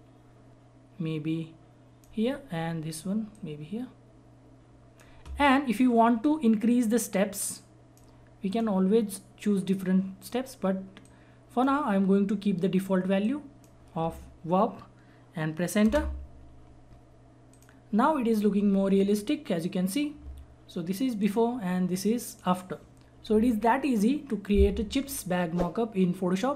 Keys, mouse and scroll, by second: 15.8 Return, 17.5 click, 21.2 click.